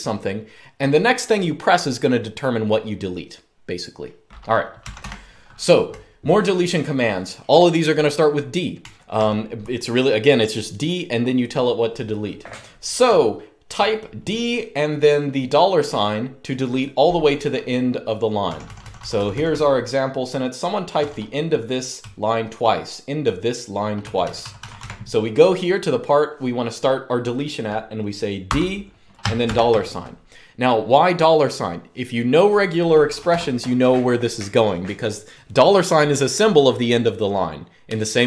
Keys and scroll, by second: 4.5-6.3 typing, 8.5-8.9 typing, 12.8-13.8 typing, 18.2-19.2 typing, 20.7-22.2 typing, 24.5 l, 28.2-29.7 typing, 33.0 u.